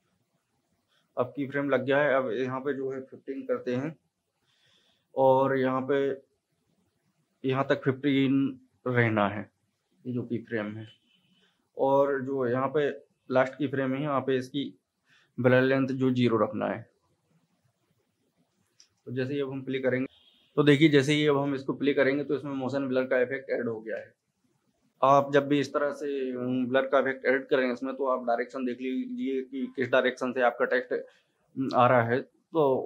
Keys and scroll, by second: 3.4 KP_1, 3.6 KP_5, 4.5 Return, 10.1 KP_1, 10.3 KP_5, 10.9 Return, 18.8 space, 21.5 space, 24.0 space.